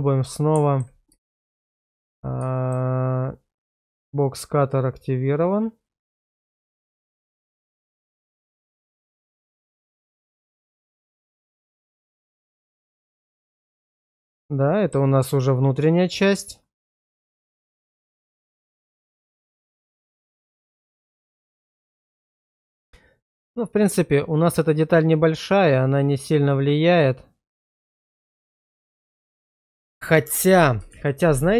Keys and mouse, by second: 0.3-0.8 middle drag, 1.3 shift+middle click, 2.1 shift+z, 2.5 shift+middle drag, 5.5 click, 5.8 click, 10.1 space, 11.6-14.9 middle drag, 17.0-29.2 middle drag, 30.9 shift+z.